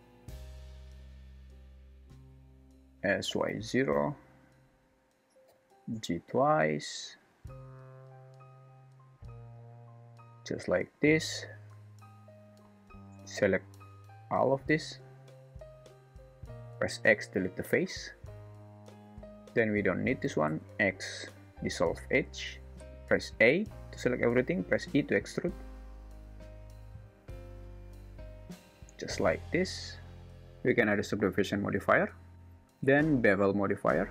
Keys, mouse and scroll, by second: 0.8 ctrl+r, 3.0 s, 5.5 g, 12.6 3, 16.8 x, 19.2 2, 20.5 x, 23.3 a, 24.8 e, 28.9 Tab, 30.8-32.3 drag, 32.3 alt+z, 33.3-34.1 drag.